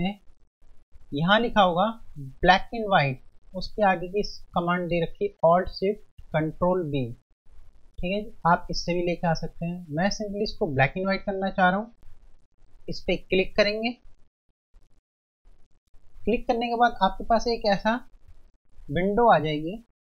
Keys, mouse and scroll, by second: 13.5 click, 15.5 F1, 16.8 click.